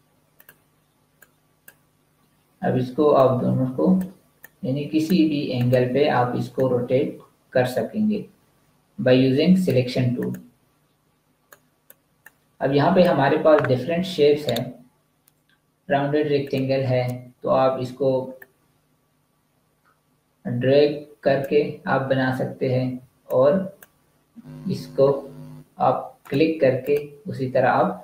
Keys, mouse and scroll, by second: 4.3 click, 14.4 right click, 16.4 click, 22.9 v, 23.3 click, 24.9 Delete, 26.1 click.